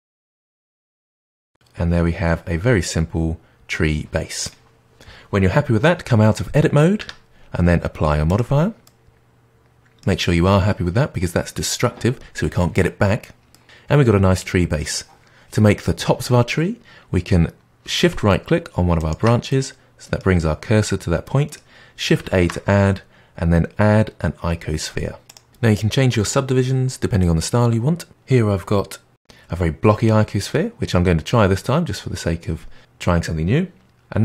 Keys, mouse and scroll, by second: 0.1 click, 0.2 g, 0.7-3.0 middle drag, 6.9 Tab, 8.2 click, 8.8-11.8 middle drag, 13.5-15.8 middle drag, 18.9-19.4 shift+right drag, 19.4-22.3 middle drag, 22.3 shift+a, 25.5 click, 26.9 click, 31.2-33.8 middle drag, 33.8 g.